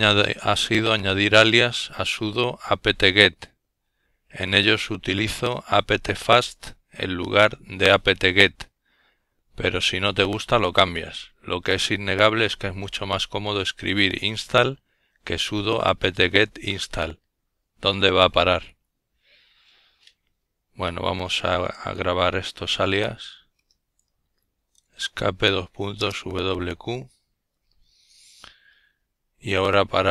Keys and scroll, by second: 19.1 Escape, 20.9-22.1 typing, 23.4 Return.